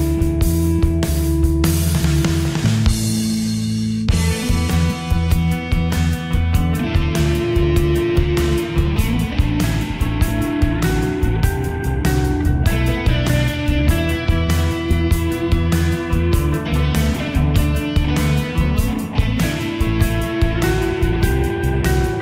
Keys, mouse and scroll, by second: 3.2 click, 5.6 Delete, 8.8 click, 9.2 F4, 11.9 click, 12.6 Delete, 13.0 click, 13.3 Delete, 14.3-17.1 drag, 17.1 shift+F2, 18.9 Escape, 19.4 click, 19.7 right click, 21.0 click.